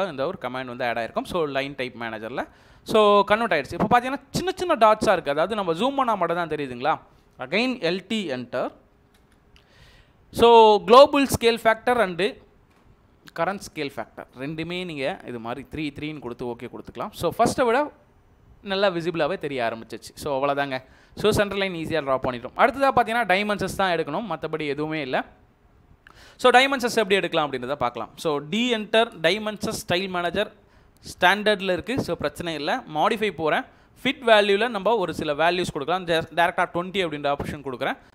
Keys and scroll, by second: 3.6 Escape, 8.2-9.1 typing, 12.1 3, 14.8 3, 28.8 d, 29.1 space, 35.6-36.6 typing.